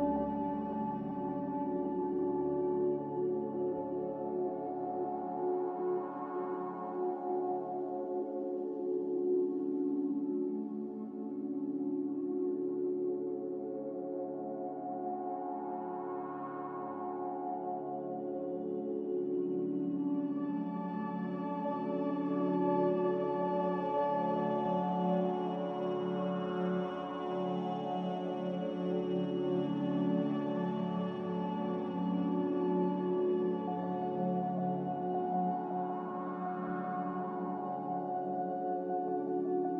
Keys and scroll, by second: 6.8 ctrl+z, 12.5 q, 37.0 b, 38.4 a, 39.4 typing.